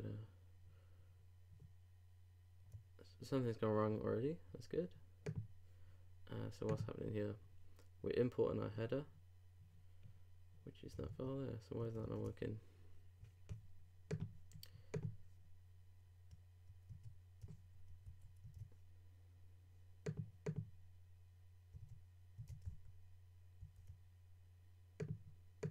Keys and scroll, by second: 11.1 super+Tab, 16.9 super+Tab, 18.1 super+s, 18.4 super+Tab, 21.8 super+Tab.